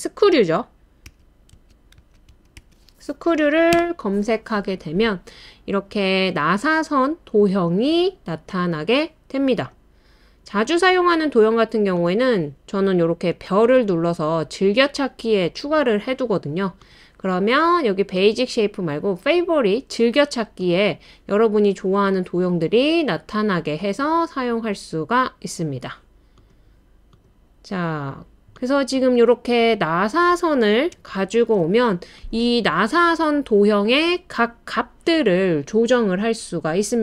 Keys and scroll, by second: 0.8-3.1 typing, 3.7 Return, 8.0 typing, 27.9 typing.